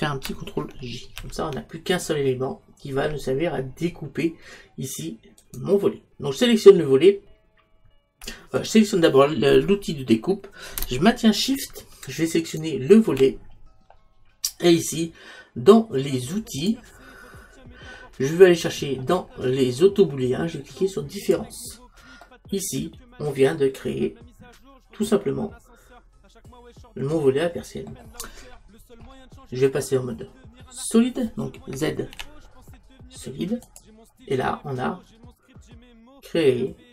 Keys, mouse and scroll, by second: 1.3 ctrl+j, 5.5-16.7 right drag, 16.7 click, 18.4-21.2 middle drag, 22.3-24.1 middle drag, 28.6-31.8 middle drag, 32.2 z, 34.5-36.9 middle drag.